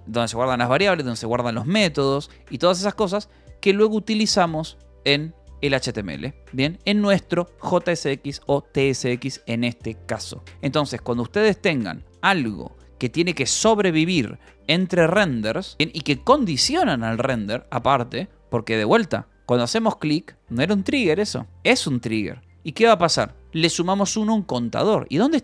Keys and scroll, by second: 0.8 j, 1.2 j, 1.6 Escape, 1.8 k, 4.5-6.5 typing, 7.6 j, 10.4 Escape, 10.5 k, 11.3 k, 12.3 shift+v, 14.9 Escape, 15.4-17.1 typing, 18.0 Escape, 18.2 k, 23.1 k, 24.0 shift+v, 24.2 Escape, 25.0-25.4 typing.